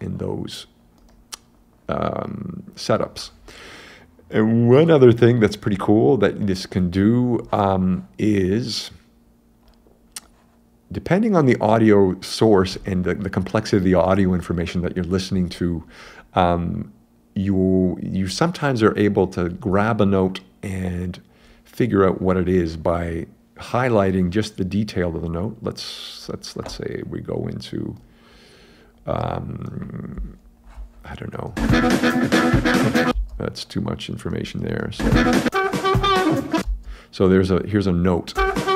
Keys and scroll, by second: 31.6 super+space, 33.1 space, 35.0 space, 36.6 space, 38.4 space.